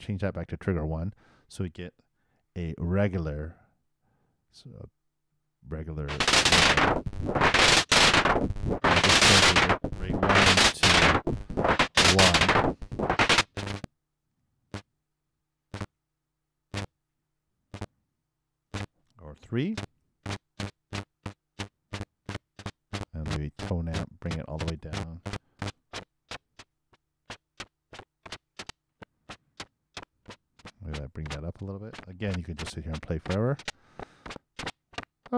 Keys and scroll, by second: 2.7 super+l, 2.9 super+Return, 5.9 super+Return, 13.3 super+Return, 19.7 super+3, 19.9 super+Return, 25.6 super+i, 25.7 super+Return, 32.4 super+4, 32.6 super+Return.